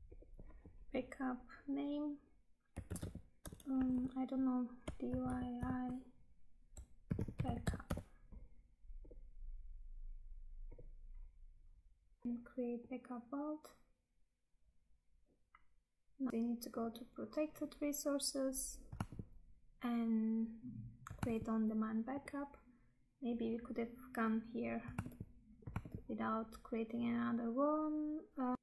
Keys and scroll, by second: 12.2 Tab, 16.3 Tab, 19.2 Tab, 21.3 Tab, 25.2 Tab, 28.5 Tab.